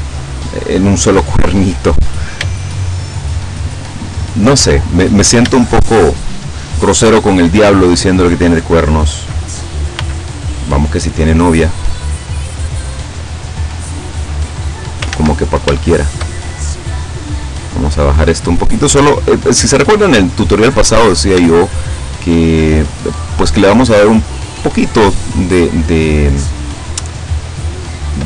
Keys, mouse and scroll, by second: 2.7-4.1 shift+middle drag, 4.1 shift+scroll up 1, 5.6-6.9 shift+middle drag, 10.0 b, 10.8-13.2 drag, 14.0-15.2 drag, 15.2 ctrl+z, 15.8 ctrl+shift+z, 16.0 shift+right click, 16.6-17.8 shift+drag, 18.2 click, 19.4 right click, 19.9 click, 22.1 shift+right click, 22.6-23.8 shift+drag, 24.1 click, 26.2 right click, 26.9-28.2 drag.